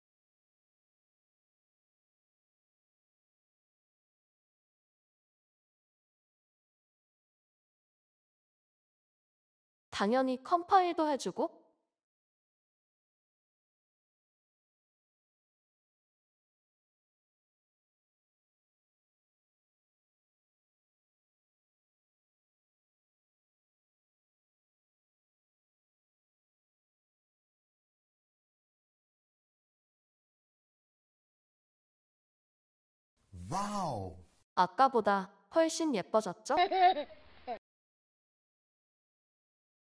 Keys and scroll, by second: 35.7-39.8 typing.